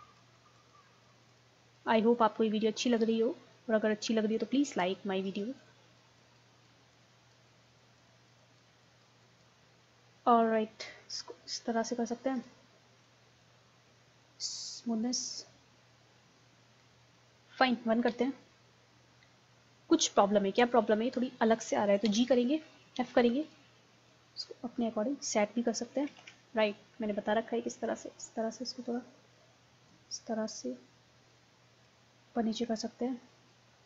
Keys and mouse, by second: 0.2-5.9 drag, 9.7 click, 10.2 middle click, 15.4-16.7 middle drag, 18.1 KP_1, 22.0 g, 23.0 f, 23.5-26.0 drag, 26.2 ctrl+z.